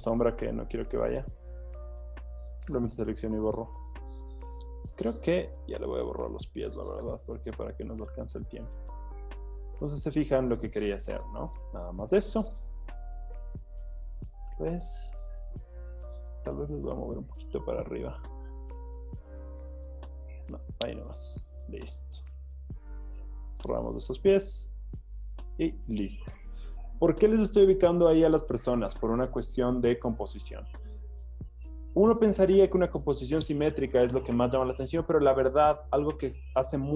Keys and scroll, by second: 0.5 Escape, 2.7-5.3 typing, 3.3 super+d, 7.0 BackSpace, 7.4 super+d, 7.7 z, 9.3 z, 12.6 v, 13.4 alt+super+z, 13.7 alt+super+z, 16.5 super+d, 16.8 v, 17.1 Up, 19.5 v, 19.7 Down, 19.9 Down, 21.1 m, 23.8 BackSpace, 24.1 super+d, 24.3 z, 26.6 z.